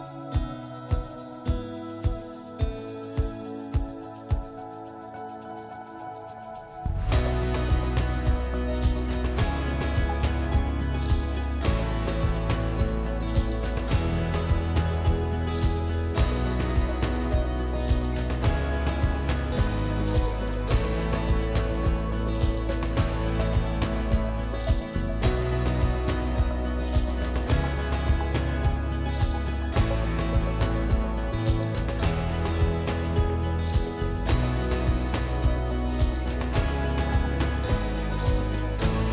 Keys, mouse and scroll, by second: 1.8 click, 2.9 right click, 2.9 click, 4.8 right click, 10.9 click, 13.5 click, 14.3 click, 16.6 l, 19.7 click, 19.7 typing, 24.4 click, 25.0 click, 26.6 click, 27.5 ctrl+click, 28.4 ctrl+click, 28.9 click, 30.4 click, 34.7 click, 36.4 click, 36.4 typing.